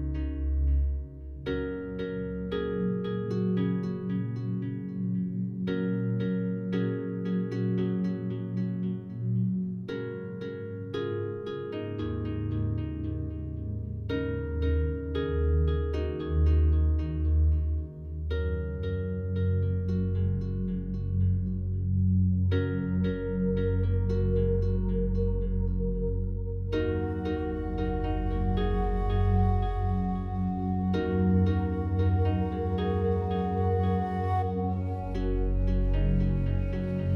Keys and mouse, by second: 0.5 click, 1.1 click, 1.6 click, 2.5-3.0 drag, 3.4 typing, 3.5 click, 4.1 click, 4.7-5.9 typing, 7.1 click, 7.8 click, 8.7 alt+click, 10.4-11.8 drag, 12.4 click, 12.7 click, 13.4 typing, 15.3 click, 16.1 click, 16.7 click, 17.4-18.0 drag, 18.7 click, 19.0 click, 19.7-20.3 typing, 21.9 click, 22.7 click, 23.3-24.3 drag, 25.0 click, 25.2-26.5 drag, 27.3 ctrl+alt+click, 27.9-29.0 drag, 29.4 click, 30.1 click, 30.8 click, 31.5-32.2 drag, 32.6 click, 33.3 click, 34.4-35.5 drag, 36.3 click.